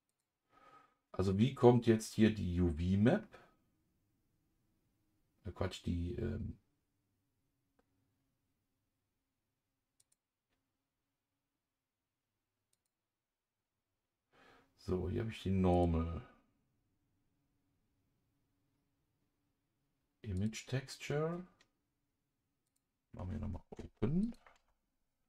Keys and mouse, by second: 10.0 click, 12.7 click, 15.7 click, 20.4 click, 22.7 click.